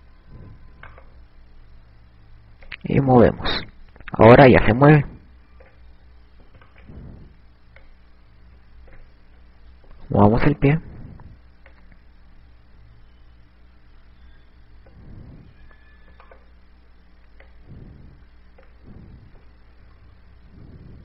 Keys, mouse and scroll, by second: 0.9 a, 2.1 right click, 3.7 click, 6.9 ctrl+z, 7.5 right click, 8.9 click, 10.3 ctrl+z, 11.3 right click, 12.7 click, 15.3 ctrl+z, 17.0 right click, 18.5 click, 19.8 ctrl+z, 20.7 KP_3, 20.9 KP_3.